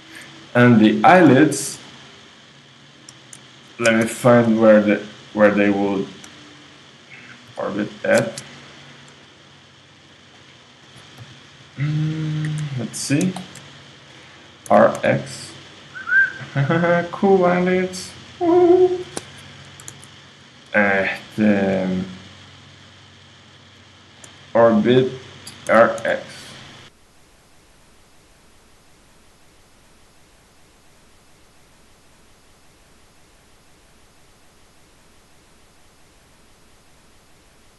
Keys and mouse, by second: 0.9-9.6 right drag, 4.1 KP_3, 7.5 c, 10.4-12.2 drag, 11.2 ,, 11.6 ., 12.5 KP_1, 13.4-14.4 drag, 14.7 r, 18.5-19.9 drag, 20.0 super+z, 21.0-25.6 right drag, 25.7 r, 30.1-31.6 right drag, 30.5 Escape, 32.2 right click, 33.8 g, 37.0 right click.